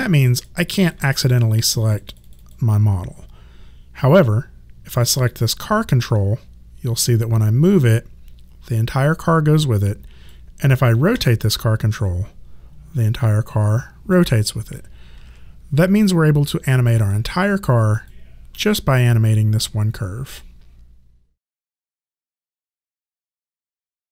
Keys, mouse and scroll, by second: 5.3 click, 11.1 e, 11.9 click, 15.2 ctrl+z, 16.9 click.